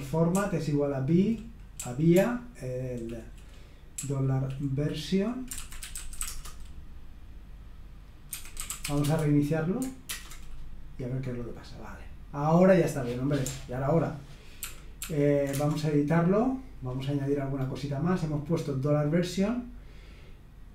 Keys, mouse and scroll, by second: 0.0-6.7 typing, 8.1-9.3 typing, 10.1 super+Return, 14.6 ctrl+p, 15.0 ctrl+p, 15.5 Return, 18.3-19.5 scroll down 1.